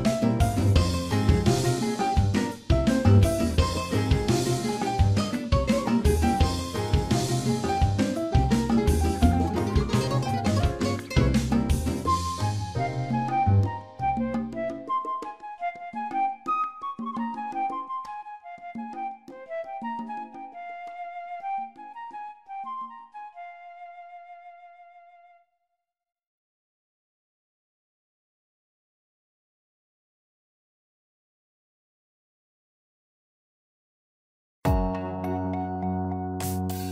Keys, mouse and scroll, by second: 1.5 click, 2.0 ctrl+click, 2.7 click, 7.1 alt+click, 8.1 click, 9.9 a, 10.3 middle click, 11.1 Tab, 12.1 ctrl+a, 13.7 click, 18.0 scroll up 1, 18.1 shift+middle click, 18.6 scroll up 2, 18.9 middle click, 20.1 shift+click, 25.1 middle click, 26.1 shift+middle click, 26.5 middle click, 29.0 Tab, 31.9 click.